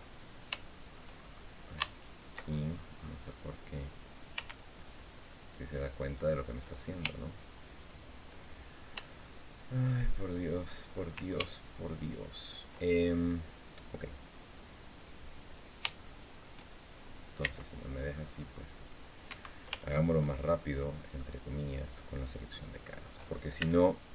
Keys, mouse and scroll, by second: 0.4 shift+middle click, 1.3 scroll up 2, 1.8 ctrl+shift+right click, 2.2-3.5 ctrl+shift+scroll down 4, 4.6 ctrl+shift+right click, 5.7 ctrl+shift+right click, 7.5 shift+right click, 8.3-8.7 shift+scroll down 1, 8.9 shift+click, 9.8 shift+scroll up 1, 11.7 ctrl+shift+right click, 14.6 click, 15.7 shift+middle click, 17.1 c, 17.6-18.8 drag, 19.0 Escape, 19.5 shift+middle click, 20.3 shift+middle click, 21.6 shift+right click, 22.0 shift+middle click, 22.5 shift+middle click, 23.3 shift+c, 23.7-24.1 drag.